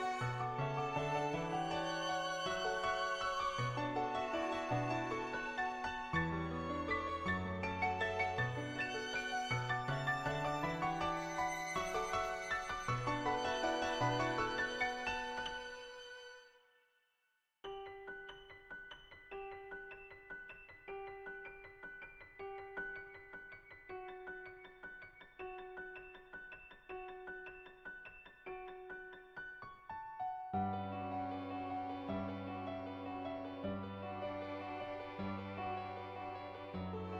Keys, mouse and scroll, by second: 4.2 shift+click, 5.7 shift+click, 6.7 shift+click, 9.9 shift+click, 10.4 middle click, 11.0 shift+middle click, 11.4 middle click, 15.6-17.1 drag, 18.6-24.2 drag, 24.6 click, 25.4 click, 26.7-28.4 drag, 29.6 ctrl+z, 29.7-30.4 [, 30.4 click, 31.0 [, 32.6 ], 33.0 ], 33.5 ], 33.7 click, 34.4 click, 35.2 click, 35.7 click, 36.9 ctrl+z.